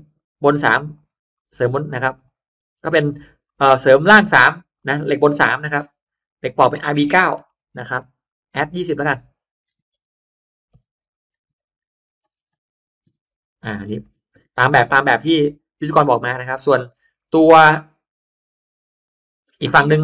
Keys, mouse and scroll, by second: 0.0 click, 0.4 3, 0.7 click, 1.0 3, 1.2 click, 2.0 click, 2.7 click, 3.0 3, 4.0 click, 4.4 3, 4.6 click, 6.2 click, 7.4 BackSpace, 7.8 9, 8.2 click, 8.8 click, 9.6 0, 10.8 2, 12.3-14.8 typing, 15.0 Return, 17.6 click.